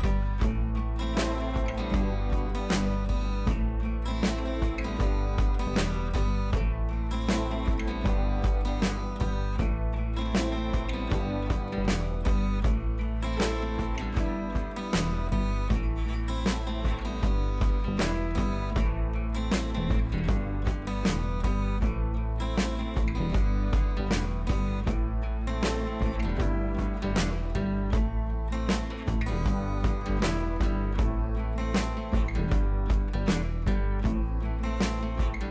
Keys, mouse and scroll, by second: 3.0 click, 4.8 click, 8.4-8.7 scroll down 1, 10.8-11.6 scroll down 1, 12.2 scroll down 1, 15.2-15.8 scroll down 1, 17.7 scroll down 1, 20.1 scroll down 1, 20.4 click, 21.4 ctrl+t, 22.2-23.8 alt+drag, 23.8 scroll up 1, 24.3 click, 25.0 ctrl+t, 25.5 alt+click, 26.6 scroll down 1, 27.4 scroll up 1, 27.8-29.7 typing, 27.9 click, 28.2 scroll up 1, 28.6 click, 28.9 scroll down 1, 29.1 scroll up 1, 29.4 click, 29.9 click.